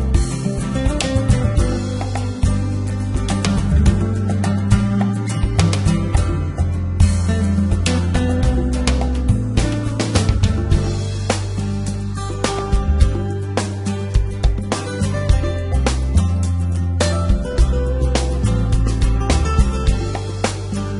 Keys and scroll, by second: 2.1 x, 3.0 Tab, 10.0 Tab, 11.0 z, 17.1 g, 17.7 z.